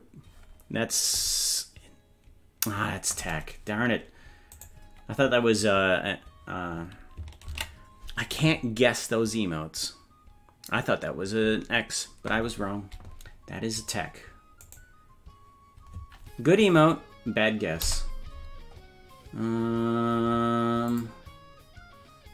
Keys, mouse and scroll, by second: 4.7-7.2 right drag, 7.7 ctrl+s, 14.8-17.9 right drag, 17.9 KP_0, 18.8-19.7 scroll up 4, 20.9 click.